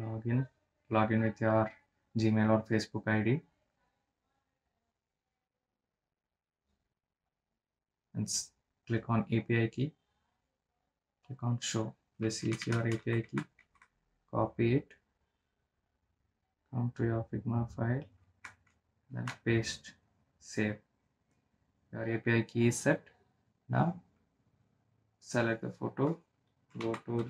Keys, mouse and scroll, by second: 0.3 click, 5.6 scroll down 1, 6.7-7.1 scroll up 1, 9.3 click, 9.7 scroll down 1, 10.3 click, 10.6 scroll down 1, 11.4-12.0 scroll down 1, 12.6 click, 14.2 ctrl+c, 16.7 click, 20.2 ctrl+a, 20.8 ctrl+v, 21.6 click, 25.6 click.